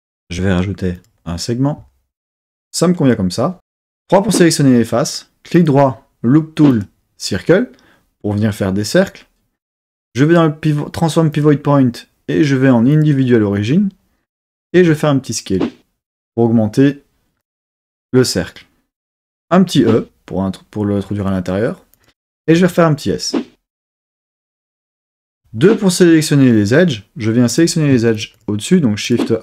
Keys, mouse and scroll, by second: 0.9 click, 3.8 3, 5.5-7.8 right drag, 8.5-11.3 right drag, 11.3-13.1 drag, 14.8 s, 17.4 click, 19.7 e, 21.9 click, 22.6 s, 24.7 click, 25.3 2, 27.5 click, 28.1 alt+shift+click, 28.3 alt+shift+click, 29.0 alt+shift+click.